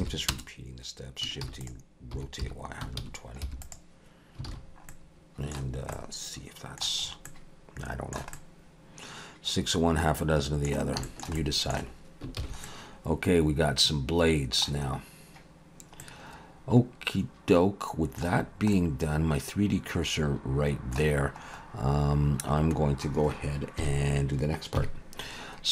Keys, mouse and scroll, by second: 1.5 shift+d, 2.1 r, 4.5 alt+a, 4.6-5.1 scroll down 2, 4.9 middle click, 5.9 middle click, 7.1-7.5 scroll up 2, 7.3 middle click, 8.3 middle click, 11.0 shift+middle click, 11.3 shift+middle click, 11.4 middle click, 12.4 ctrl+s, 12.7 middle click, 16.0 middle click, 18.5 scroll down 1, 18.7 middle click, 21.2-22.2 scroll up 6, 22.2-23.8 scroll down 6, 23.8 KP_1.